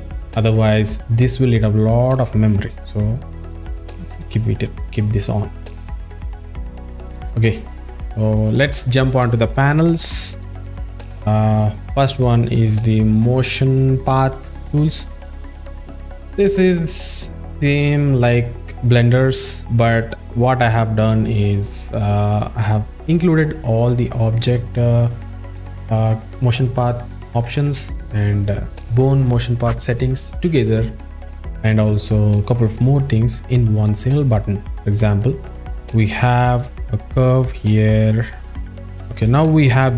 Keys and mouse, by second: 6.0 click, 6.4 click, 11.1 click, 34.8 click, 36.7 ctrl+middle click, 37.7 shift+middle click, 39.8 click.